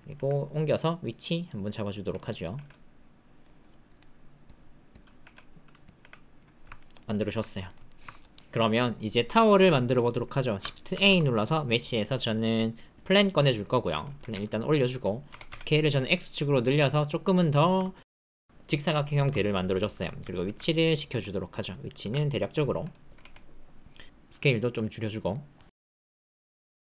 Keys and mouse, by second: 0.1 g, 2.1 click, 2.5 r, 3.9-5.0 drag, 5.2 r, 5.9 g, 6.7 ctrl+click, 7.1 ctrl+middle click, 7.4 middle click, 7.8 shift+middle click, 8.0 ctrl+middle click, 10.9 shift+a, 14.2 g, 15.3 s, 16.9 click, 17.6 shift+click, 17.9 ctrl+click, 19.1 shift+click, 19.5 click, 20.4-24.2 typing, 24.8 click, 26.0 click.